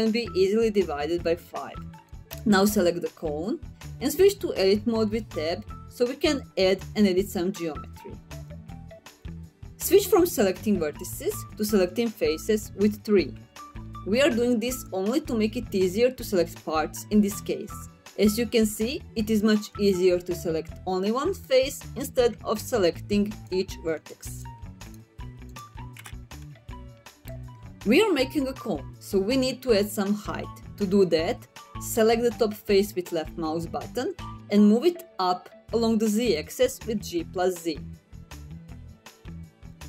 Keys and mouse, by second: 2.7 click, 8.5 Tab, 15.2 3, 21.5 click, 24.1 1, 25.2 click, 25.7 shift+click, 26.2 shift+click, 26.7 shift+click, 27.3 click, 27.8 3, 32.1 middle click, 35.7 g, 36.3 z, 38.0 click, 39.1-39.8 middle drag.